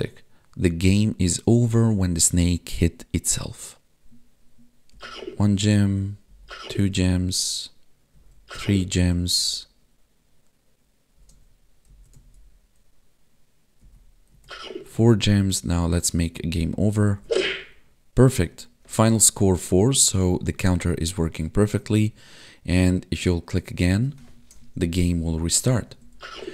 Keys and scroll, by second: 4.0 Right, 4.9 Down, 5.0 Left, 5.6 Up, 5.7 Right, 6.3 Up, 6.7 Left, 7.1 Down, 8.1 Right, 8.6 Down, 9.1 Right, 11.2 Up, 11.9 Right, 12.1 Left, 13.8 Down, 14.3 Right, 15.3 Up, 16.0 Right, 16.4 Down, 16.8 Left, 16.9 Up, 17.1 Right, 17.2 Up, 18.4 Left, 25.3 Down, 25.8 Left, 26.1 Up.